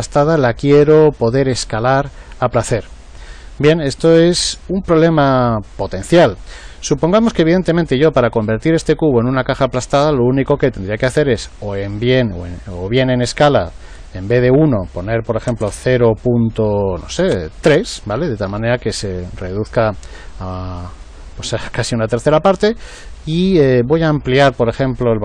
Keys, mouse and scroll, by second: 12.2 click, 24.7 click.